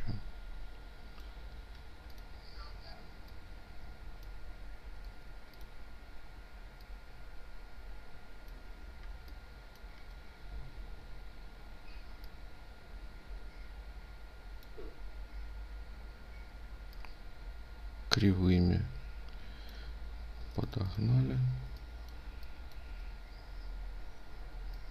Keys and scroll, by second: 4.5 ctrl+z, 20.0 ctrl+alt+space.